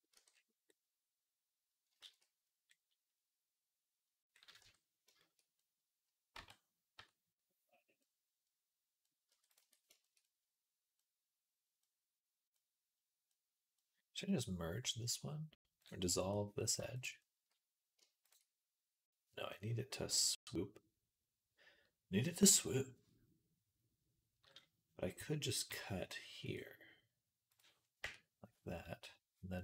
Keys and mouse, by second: 0.0 Tab, 0.5-1.7 right drag, 1.9 ctrl+s, 4.5 Tab, 6.2 Tab, 6.8 Tab, 7.8-29.6 right drag, 9.1 Tab, 9.3 click, 9.3 middle click, 15.6 click, 16.4 click, 28.6 click, 29.4 click.